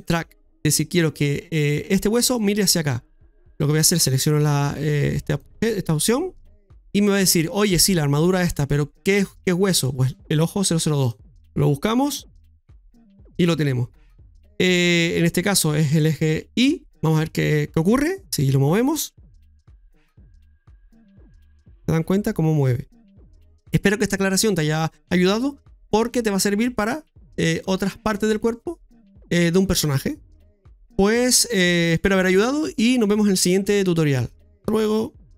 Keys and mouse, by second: 3.9 click, 10.9-12.7 drag, 17.2 middle click, 18.4 right click.